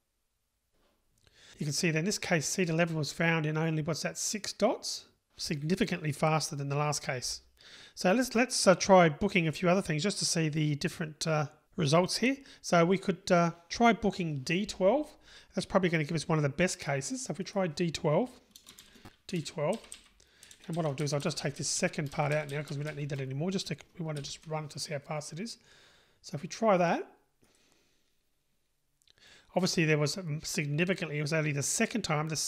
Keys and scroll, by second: 19.8 Delete, 23.9 Delete, 24.2 super+/, 27.5 super+/, 27.8 super+r.